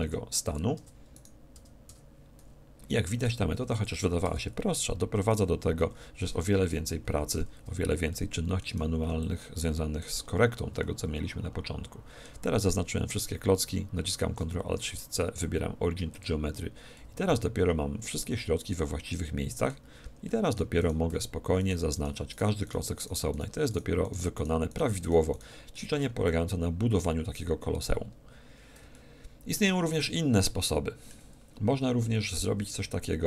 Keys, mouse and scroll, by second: 0.0 p, 0.8 Tab, 1.1-2.9 right drag, 1.6 Tab, 2.4 a, 3.2 p, 4.2 Tab, 5.2-7.0 right drag, 5.8 a, 6.7 KP_1, 7.0 z, 8.1-9.8 middle drag, 9.0 b, 10.8-14.6 middle drag, 16.9-18.9 ctrl+alt+shift+middle drag, 19.8 z, 20.2-22.0 middle drag, 20.8-27.2 right drag, 21.1 z, 25.7-32.0 middle drag, 26.0 z.